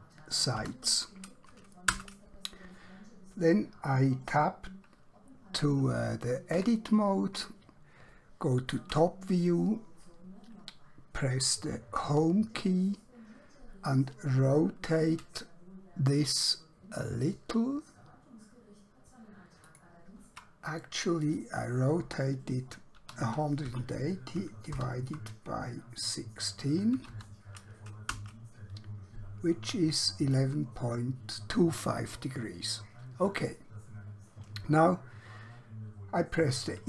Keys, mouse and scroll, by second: 0.0-0.5 typing, 2.0 Return, 6.5 Tab, 9.1 KP_7, 12.1 Home, 15.1 r, 17.5 shift+Num_Lock, 21.3 click, 22.9-23.6 typing, 24.7 shift+7, 27.1 typing, 28.2 Return, 30.4 click.